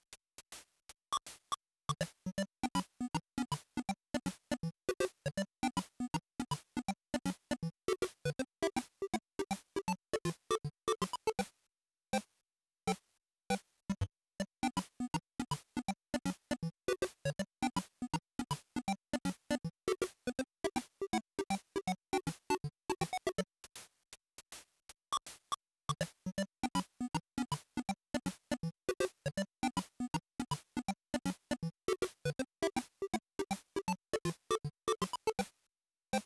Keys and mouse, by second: 3.6-17.3 drag, 27.9-36.2 drag.